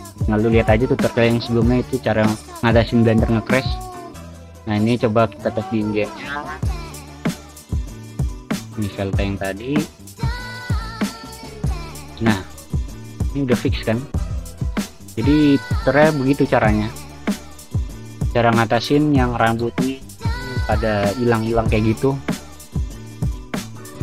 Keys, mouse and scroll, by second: 2.8 click, 3.5 click, 3.8 click, 5.1 click, 6.0 click, 6.3 click, 7.5 click, 9.3 click, 10.1 v, 10.5 v, 15.4 w, 16.4 d, 17.0 alt+s, 17.4 v, 20.0 w, 20.4 space, 20.6 a, 21.8-23.2 typing.